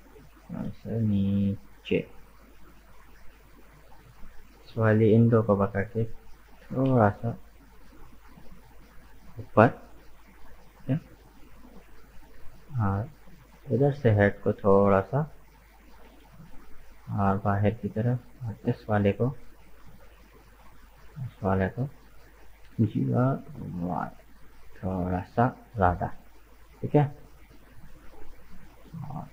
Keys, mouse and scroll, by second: 2.4-3.5 middle drag, 3.5 right click, 3.9-5.0 middle drag, 5.0 shift+right click, 5.3-6.6 middle drag, 6.6 g, 9.5-13.2 middle drag, 13.2 right click, 13.7 shift+right click, 14.0-15.8 middle drag, 15.8 g, 17.6 middle click, 18.5 right click, 18.8-21.0 middle drag, 21.0 shift+right click, 21.4-22.7 middle drag, 22.7 g, 24.7-29.3 middle drag.